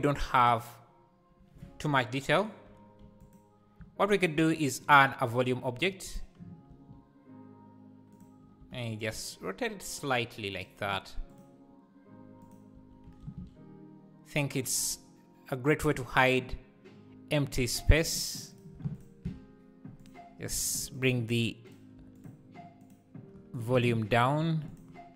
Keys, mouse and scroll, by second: 0.0 click, 0.2 x, 1.8 ctrl+z, 3.4 x, 4.2 shift+right click, 4.3 shift+a, 6.7 s, 8.6 r, 11.3-12.5 drag, 12.8 x, 13.3 shift+a, 19.0 ctrl+shift+click, 20.0-21.1 drag, 21.7 click, 22.8 click.